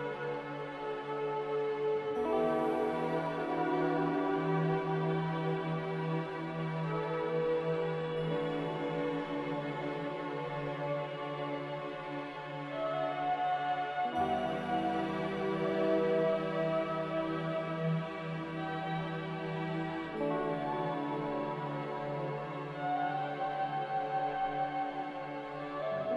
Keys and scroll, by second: 6.2 z, 19.7 ctrl+z, 20.5 ctrl+z.